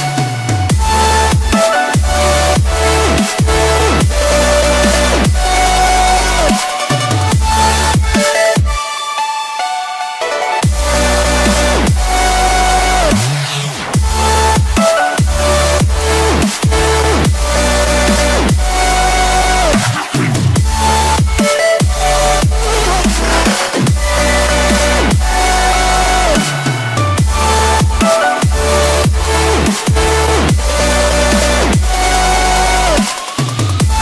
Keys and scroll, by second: 1.4 Delete.